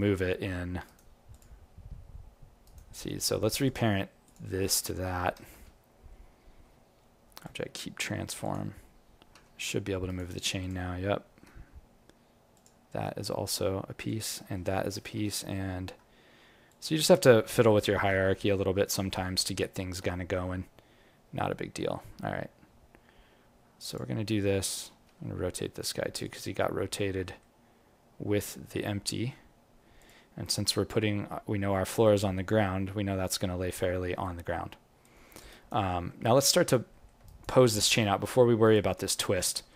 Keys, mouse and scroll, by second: 1.8 g, 3.1-3.9 scroll up 5, 3.6 click, 4.2 shift+click, 5.2 ctrl+p, 8.7-9.3 scroll down 4, 9.3 g, 10.6 click, 11.0 scroll up 3, 12.5 shift+click, 15.1 ctrl+p, 18.2 g, 19.3 alt+middle click, 19.5 alt+right click, 21.7 g, 30.3-31.3 scroll up 7, 31.3 scroll down 1, 31.5 scroll down 2, 31.7 alt+middle click, 32.4-32.7 scroll up 1, 32.7 scroll down 1, 33.2-33.8 scroll down 8, 33.8 alt+middle click, 34.4-35.0 scroll up 2, 35.0 alt+click, 35.5 alt+right click, 35.8 alt+middle click, 36.2 alt+right click, 36.4 alt+click, 36.9 alt+middle click, 37.2 alt+right click, 37.5 alt+click, 37.9 alt+middle click, 38.7 alt+click, 39.5 alt+middle click.